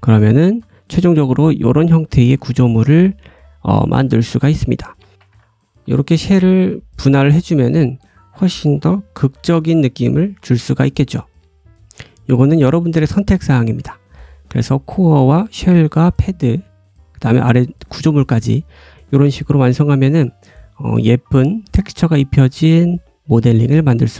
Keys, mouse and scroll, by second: 0.1 scroll up 1, 0.3 shift+middle click, 0.7 scroll down 2, 1.0-1.6 scroll up 2, 1.1 middle click, 1.8 middle click, 2.2 scroll down 1, 2.4 middle click, 4.8 click, 5.1 Tab, 5.1 alt+a, 5.1 l, 5.1 p, 5.2 click, 5.7 g, 6.4 click, 7.6 Tab, 8.9 l, 9.2 l, 9.8 g, 10.3 Tab, 10.6-13.4 drag, 10.6 middle click, 10.6 right click, 10.9 middle click, 10.9 right click, 12.5 middle click, 13.5 click, 13.8 scroll up 1, 14.1 click, 15.4 click, 15.8 click, 16.1-16.5 drag, 16.4 scroll down 1, 16.8 click, 17.3 middle click, 17.7-24.1 right drag, 17.7 middle click, 19.3-19.8 drag, 19.8 middle click, 20.1-20.5 scroll down 1, 20.5 middle click, 21.3 middle click.